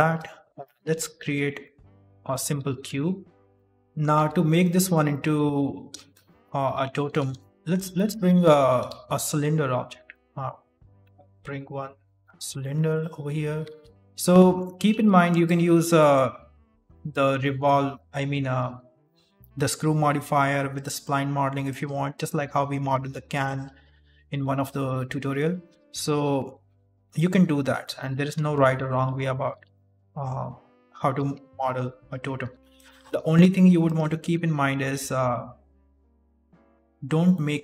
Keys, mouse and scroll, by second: 0.6 shift+middle click, 1.1 a, 1.8 Delete, 2.2 middle click, 2.5 shift+a, 3.4 middle click, 3.4 scroll down 2, 3.6 middle click, 3.7 scroll up 1, 4.1 Tab, 4.5 middle click, 5.5 Tab, 6.0 middle click, 6.5 Delete, 7.3 shift+s, 8.8 shift+a, 13.8 alt+g, 14.1 ctrl+z, 14.1 middle click, 14.8 ctrl+r, 16.2 s, 17.3 middle click, 17.9 right click, 18.5 alt+right click, 19.0 middle click, 20.0 s, 21.0 middle click, 21.8 right click, 21.9 alt+right click, 22.4 middle click, 22.7 s, 23.6 middle click, 24.1 right click, 24.4 alt+right click, 24.8 middle click, 25.4 middle click, 26.0 ctrl+r, 27.4 s, 28.1 g, 29.1 middle click, 29.5 g, 30.4 right click, 31.4 ctrl+r, 33.1 s, 34.3 KP_1, 35.1 shift+middle click, 35.2-35.9 scroll up 2, 35.9 right click, 36.6 middle click, 37.3 middle click.